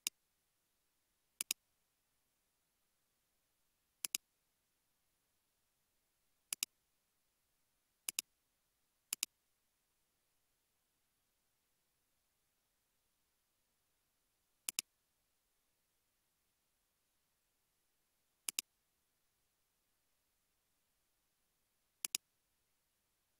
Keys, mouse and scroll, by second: 0.7 typing, 1.8-2.3 typing, 4.2-5.6 typing, 6.6-7.5 typing, 11.3-12.8 typing, 13.3 Return, 17.0 typing, 23.2 scroll down 1.